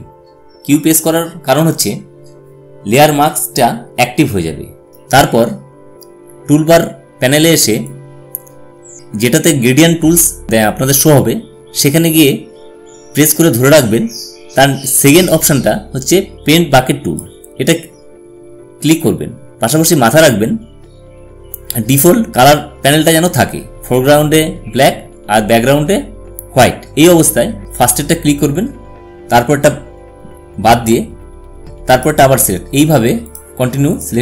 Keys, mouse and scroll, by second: 7.6-16.4 drag, 27.6 click, 31.6 click.